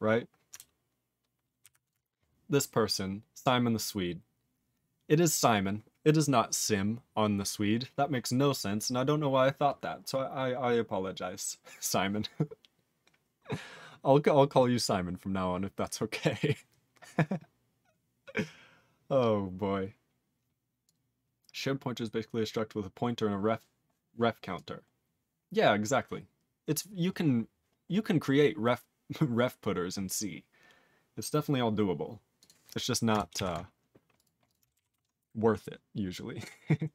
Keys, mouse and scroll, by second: 23.5 scroll up 4, 24.1 scroll up 4, 32.4 click, 32.4 click, 34.1 click, 34.2 click, 34.4 click, 34.5 click, 34.9 ctrl+s.